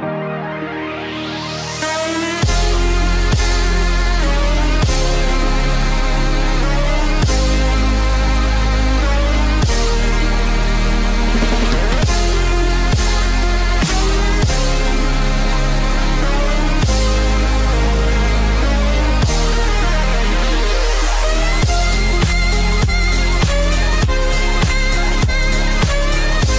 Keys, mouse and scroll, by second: 2.9 ctrl+b, 13.6 scroll down 3, 13.9 middle click, 15.0 scroll up 2, 15.4 middle click, 17.6 click, 19.6 click, 20.0 scroll down 3, 20.5 middle click, 22.8 middle click, 23.6 middle click, 23.6 scroll up 1, 24.8 scroll up 2, 26.0 click.